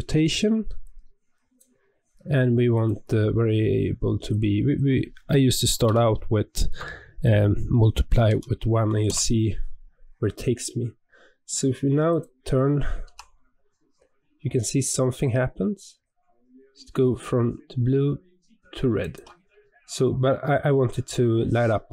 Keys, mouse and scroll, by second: 10.4-12.0 scroll down 2, 12.0 click, 13.0 r, 19.5-20.3 scroll up 4, 20.3-21.0 scroll down 1, 21.0 scroll down 2.